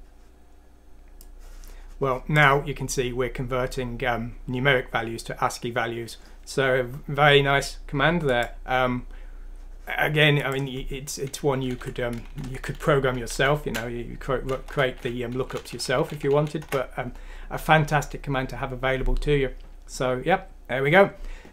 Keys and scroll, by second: 11.5 Up, 11.8 Down, 11.9 typing, 13.4 typing, 14.9-15.5 typing, 16.6 typing.